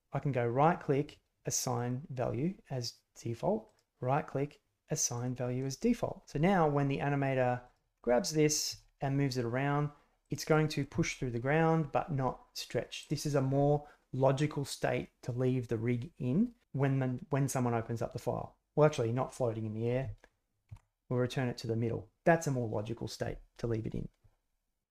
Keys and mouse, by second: 3.6-5.2 drag, 7.6 drag, 7.9 middle drag, 8.1 click, 8.2 middle click, 8.3 click, 10.4 middle click, 10.7 click, 10.9 g, 20.6 alt+g.